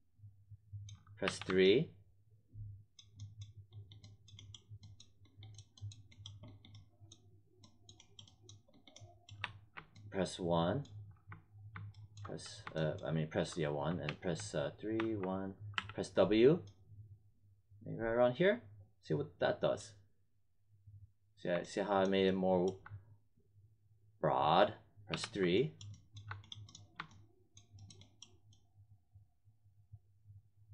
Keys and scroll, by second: 1.2 3, 9.3 1, 13.4 1, 14.0 3, 14.9 1, 15.7 w, 25.0 3.